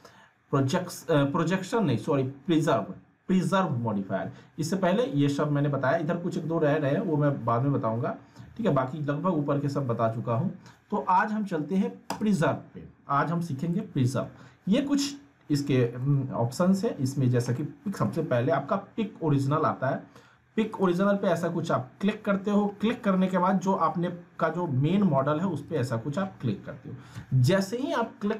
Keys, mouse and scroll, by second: 12.1 click, 13.8-14.4 middle drag, 20.7 click, 21.4-22.0 middle drag, 25.7 click.